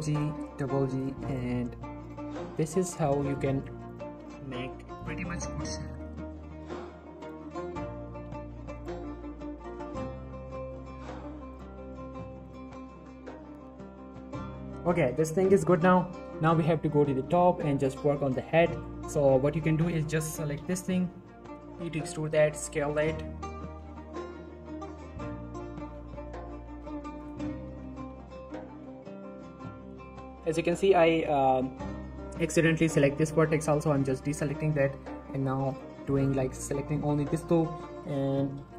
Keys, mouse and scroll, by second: 0.0-1.5 typing, 1.0 click, 2.0 click, 2.2 scroll down 1, 2.3-2.8 middle click, 3.1-3.5 shift+scroll up 2, 3.5 middle click, 3.9 click, 4.4 g, 4.5 g, 5.0 click, 5.4 g, 5.6 g, 5.7 click, 6.0-6.5 middle click, 6.5 scroll down 1, 6.6 middle click, 6.7-7.2 scroll up 1, 7.2 click, 7.4-7.9 middle click, 7.9 scroll up 1, 8.1 g, 8.2 g, 8.7 click, 8.9 scroll down 1, 9.0-9.8 middle click, 9.7 scroll up 1, 9.9 middle click, 10.4 scroll down 1, 10.7 middle click, 11.1-11.5 scroll up 1, 11.5 click, 11.8-13.8 typing, 12.4 click, 13.2 click, 13.5 middle click, 13.9 click, 14.1-14.5 scroll down 2, 14.3 Tab, 14.5 middle click, 14.8 click, 16.2 shift+middle click, 16.6 shift+scroll up 2, 17.0 shift+middle click, 17.8 click, 18.1 shift+middle click, 18.2 shift+Tab, 18.4 z, 18.7 middle click, 19.0 z, 19.3 middle click, 19.8 alt+shift+click, 21.1 scroll up 1, 21.4-21.7 scroll down 1, 21.7 e, 22.2 click, 22.4 s, 22.9 right click, 23.8 s, 24.1 right click, 24.2 z, 24.5 scroll down 1, 26.7 s, 27.2 right click, 27.7 ctrl+z, 29.4 Tab, 30.0 shift+middle click, 30.2-30.5 scroll up 1, 30.9 shift+middle click, 32.4 scroll up 1, 33.7 ctrl+click, 34.0 scroll down 1, 34.2 shift+middle click, 34.7-35.3 scroll up 2, 35.0 shift+middle click, 35.7 click, 36.2 alt+shift+click, 37.0 shift+middle click, 37.2-38.6 shift+scroll down 2.